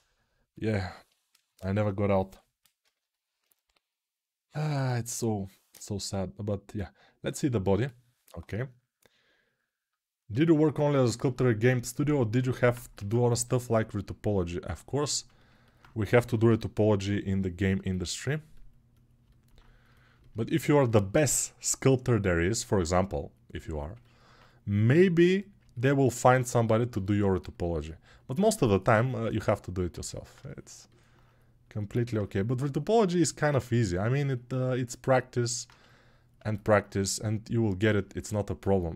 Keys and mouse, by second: 0.5-2.0 alt+middle drag, 2.0-9.5 drag, 9.5-12.2 alt+right drag, 12.2-14.7 ctrl+alt+drag, 12.9 ctrl+Tab, 14.7-17.2 alt+middle drag, 17.2-38.9 drag.